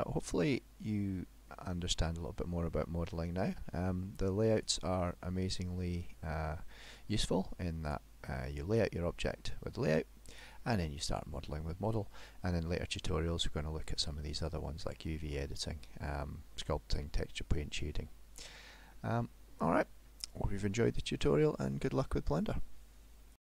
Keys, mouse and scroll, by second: 0.4-1.1 scroll down 1, 1.1 middle click, 1.1-2.0 scroll down 3, 4.6 click, 10.4 click, 19.0 middle click, 20.1 middle click.